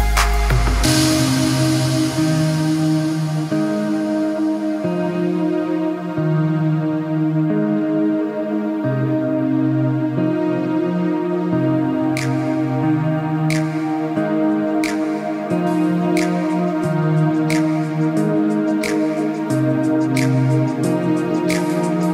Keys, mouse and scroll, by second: 0.4 g, 2.0 click, 2.6 Tab, 2.8 middle click, 3.3-3.7 scroll up 3, 3.8 scroll down 1, 4.2 middle click, 4.6 middle click, 5.1 click, 5.8-6.1 scroll up 3, 6.2 middle click, 6.7-7.0 scroll up 1, 7.0 scroll down 1, 7.3 middle click, 7.3-8.7 scroll down 5, 7.9 middle click, 8.8 click, 9.4 Tab, 9.7 click, 10.4 h, 11.0 Tab, 11.5 click, 11.8 Tab, 12.1 middle click, 12.4 click, 13.2 3, 13.2 click, 13.6 middle click, 14.0 s, 15.4 click, 15.6 middle click, 16.0 scroll down 1, 16.2 middle click, 16.9 Tab, 17.2 middle click, 18.0 click, 18.2 click, 18.5 scroll down 1, 18.7 middle click, 19.5 middle click, 19.7 middle click, 19.9-20.6 scroll down 2, 20.1 middle click, 20.6 click, 20.9 middle click, 21.3 scroll up 1, 21.5 middle click, 21.8 g.